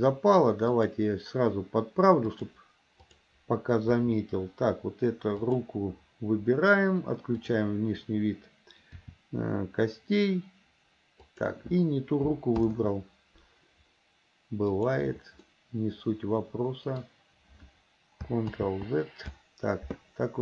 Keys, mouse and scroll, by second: 0.8 click, 2.3-3.4 drag, 4.1 KP_3, 5.4 click, 9.1 r, 12.8 ctrl+z, 14.8 click, 15.6-17.1 middle drag, 18.7 ctrl+z.